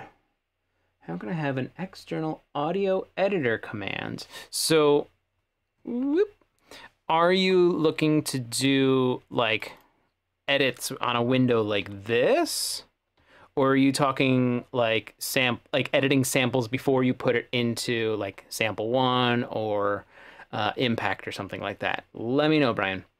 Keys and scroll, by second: 11.9-13.3 typing.